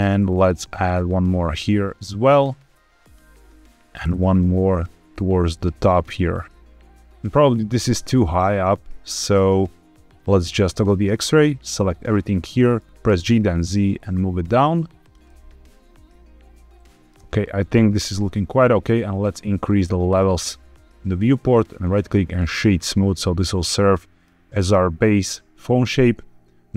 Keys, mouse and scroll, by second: 2.9 click, 3.9 ctrl+r, 7.3 click, 8.1-9.4 middle drag, 10.9 click, 11.4 click, 12.3 middle click, 12.8 Escape, 12.8 g, 12.8 z, 13.0 g, 13.1 z, 14.9 click, 15.2-17.0 middle drag, 17.1 Tab, 17.9 middle click, 20.0 click, 21.7 right click, 22.8-24.2 middle drag, 24.6-25.9 scroll up 2.